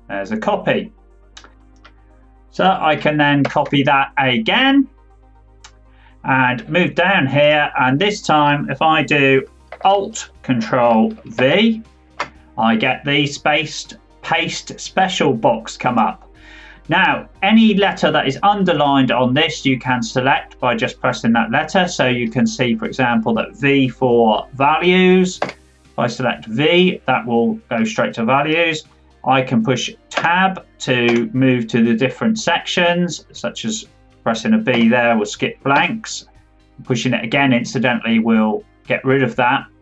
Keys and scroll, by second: 3.4 ctrl+c, 11.3 ctrl+alt+v, 30.1 Tab.